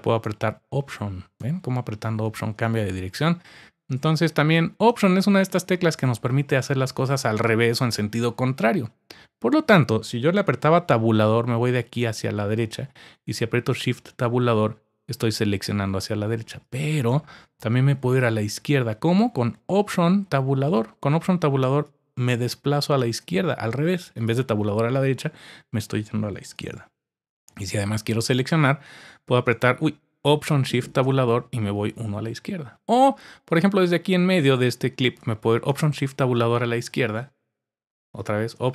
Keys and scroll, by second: 13.5 shift+Tab, 20.6 alt+Tab, 23.0 alt+Tab, 26.5 alt+Tab, 28.5 alt+shift+Tab, 29.0 alt+shift+Tab, 30.9 alt+shift+Tab, 35.7 alt+shift+Tab.